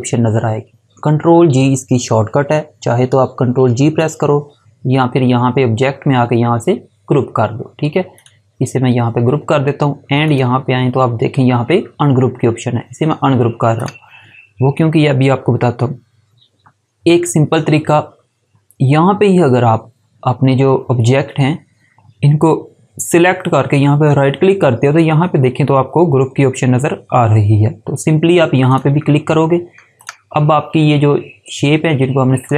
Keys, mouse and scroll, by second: 3.5 4, 8.1 click, 13.7 click, 23.8 right click, 28.6 click.